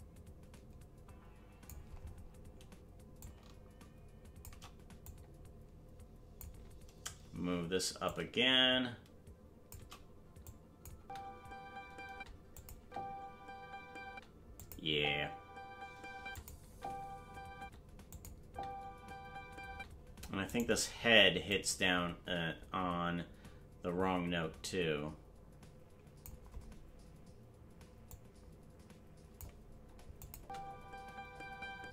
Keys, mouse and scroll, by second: 3.2-4.4 drag, 5.0-6.4 drag, 8.0-9.7 drag, 10.4 click, 10.9 space, 12.5 click, 12.5 space, 12.7 space, 14.6 click, 14.6 space, 14.8 space, 16.3 click, 16.3 space, 16.6 space, 18.1 click, 18.1 space, 18.4 space, 20.6 right click, 20.6 space, 21.5-26.2 drag, 28.0-29.4 drag, 30.2-31.4 drag, 30.3 space, 31.7 space.